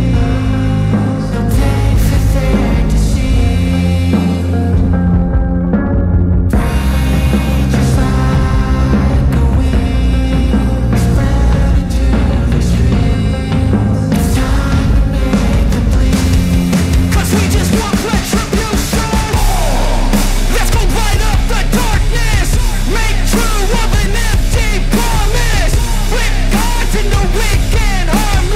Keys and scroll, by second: 0.0 ctrl+=, 6.7 space, 7.1 ctrl+-, 7.4 ctrl+alt+z, 8.4 ctrl+-, 8.8 ], 10.4 ctrl+-, 10.9 space, 11.5 ctrl+-, 11.7 space, 12.7 ctrl+-, 12.9 ], 14.0 ], 15.0 ctrl+-, 16.5 ctrl+-, 19.4 ctrl+alt+z, 21.4 space, 21.9 space, 22.6 space, 25.1 space, 27.7 ctrl+alt+z, 28.2 space.